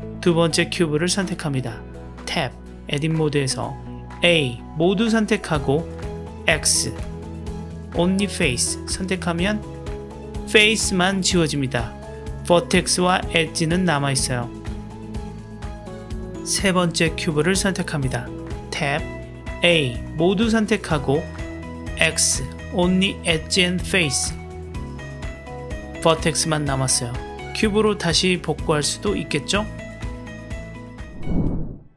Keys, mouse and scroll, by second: 1.2-2.2 middle drag, 2.2 Tab, 3.9 a, 6.1 x, 10.3-12.3 middle drag, 15.1 shift+click, 15.7 middle click, 16.6 click, 18.0 Tab, 19.6 a, 21.3 x, 26.5 middle click, 28.3 Tab, 29.7-31.3 middle drag.